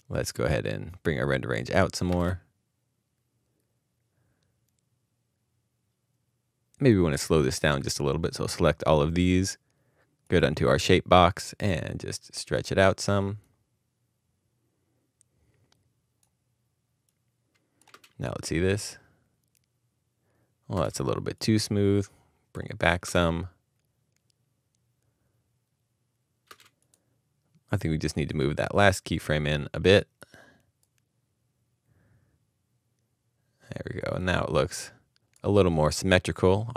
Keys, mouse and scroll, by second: 1.5 space, 2.1 space, 17.9 space, 20.7 space, 20.7 space, 23.0 space, 26.4 space, 26.9 space.